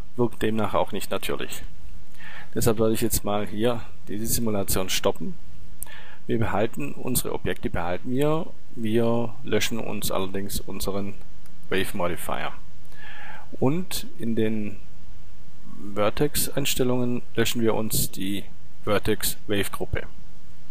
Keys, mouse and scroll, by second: 0.1 click, 4.5-6.0 drag, 6.2 click, 11.5-14.0 drag, 14.2-16.7 drag, 19.0-20.7 drag.